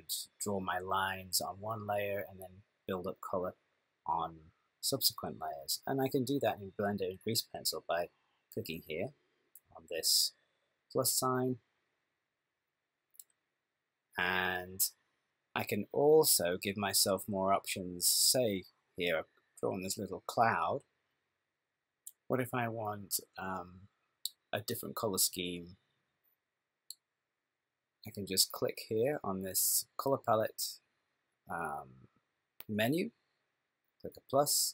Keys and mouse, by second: 12.1 click, 17.6 click, 21.8 click, 28.6 click, 28.8 click, 33.4 click.